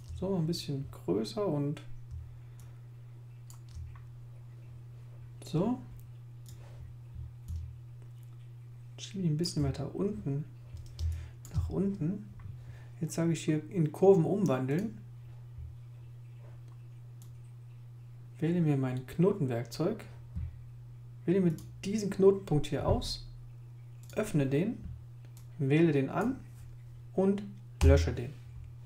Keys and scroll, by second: 11.0 space, 27.8 Delete.